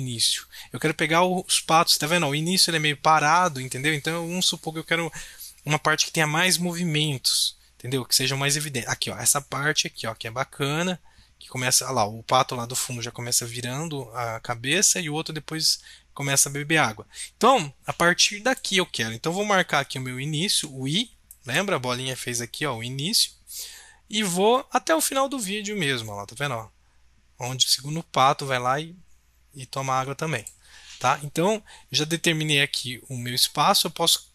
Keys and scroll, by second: 20.5 i.